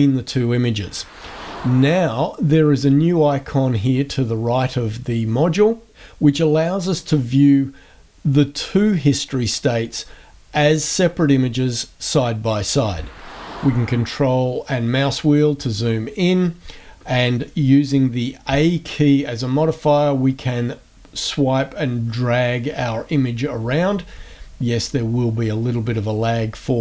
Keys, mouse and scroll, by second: 14.3 ctrl+scroll up 1, 15.4 ctrl+scroll up 1, 18.5 a, 19.5-20.7 drag, 21.8 click.